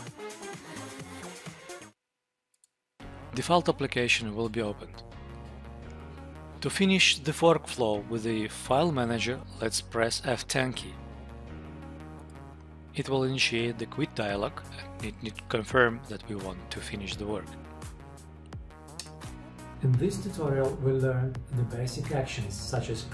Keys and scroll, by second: 11.0 F10.